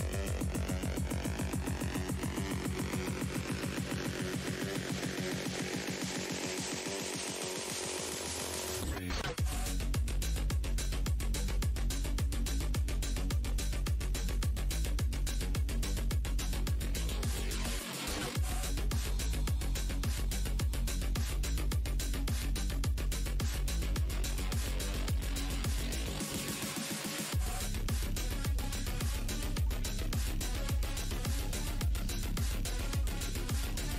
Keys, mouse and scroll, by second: 0.0 Delete, 0.4 space, 1.4 right click, 1.5 space, 2.8 click, 3.8 alt+r, 3.9 scroll down 1, 7.9 click, 10.0 right click, 10.5 click, 11.7 shift+click, 12.0 w, 12.6 shift+click, 13.4 shift+click, 13.9 shift+right click, 14.4 alt+click, 18.1 w, 18.9 click, 19.9 right click, 21.2 alt+click, 22.0 shift+right click, 24.4 click, 26.1 shift+right click, 26.5 alt+click, 30.5 shift+z, 31.2 click, 32.6 w, 33.3 click, 33.4 alt+scroll down 1.